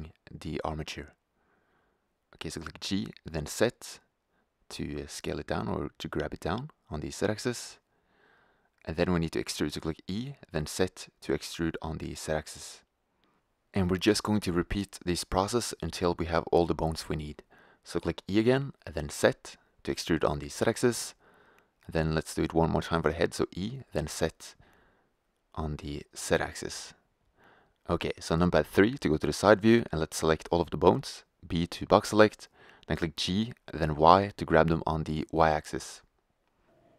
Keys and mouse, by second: 2.6 g, 7.9 click, 8.7 e, 14.3-17.5 drag, 18.2 e, 22.5 e, 27.6 KP_3, 30.4 b, 34.1 g.